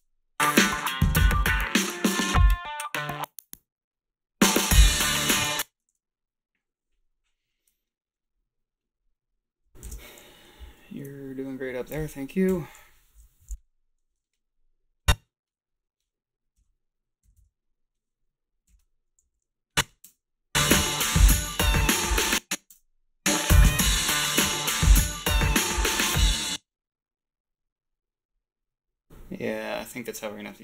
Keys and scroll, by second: 5.3 space, 9.8 shift+z, 12.4 Home, 16.6 Delete, 17.2 Delete, 17.4 =, 18.7 h, 20.0 space, 22.1 space, 22.7 a, 26.3 space.